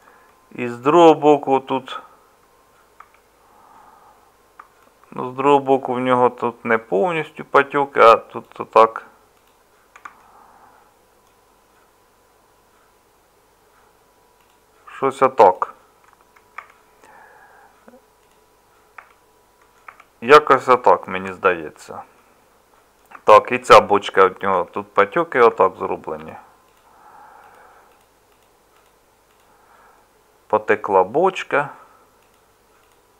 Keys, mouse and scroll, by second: 3.0 Tab, 16.6 Tab, 19.0 Tab, 19.9 Tab, 24.5 Tab.